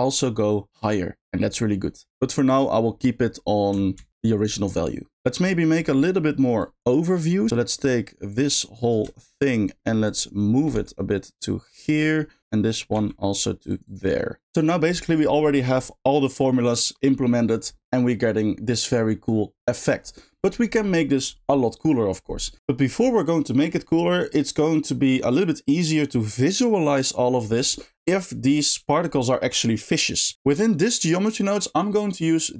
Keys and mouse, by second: 2.1 space, 4.0 ctrl+z, 5.7 middle click, 6.6-7.5 drag, 7.5 g, 8.3-8.9 drag, 9.5 shift+drag, 10.2-10.5 shift+drag, 10.8 g, 12.0 middle click, 12.4 click, 13.0 g, 13.9 click, 14.2 middle click, 15.1 middle click, 18.3-19.4 middle drag.